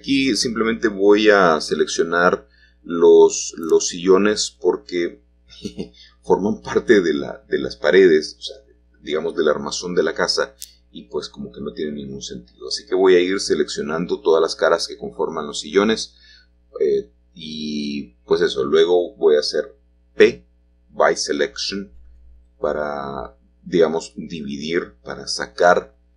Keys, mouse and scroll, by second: 2.0 click, 2.7 click, 3.2 click, 3.6 click, 4.0 click, 4.8-7.0 drag, 7.0-7.5 scroll up 1, 7.5 shift+middle click, 7.9 Tab, 8.8 click, 10.2-19.0 l, 20.0 ctrl+z, 20.8 middle click, 21.4-21.7 scroll up 1, 22.8 l.